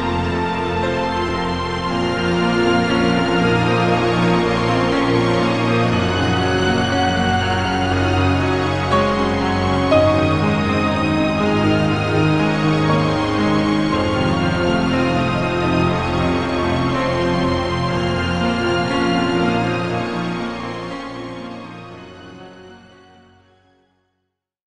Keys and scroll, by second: 1.0 +, 1.6 i, 2.3 i, 2.9 -.